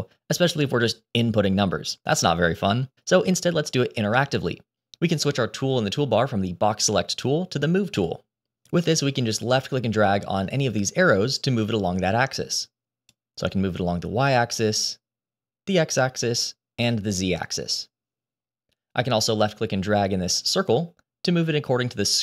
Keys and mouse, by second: 7.1 click, 10.6-13.0 drag, 14.7 click, 16.3-17.4 drag, 20.5 click, 20.6-22.2 drag.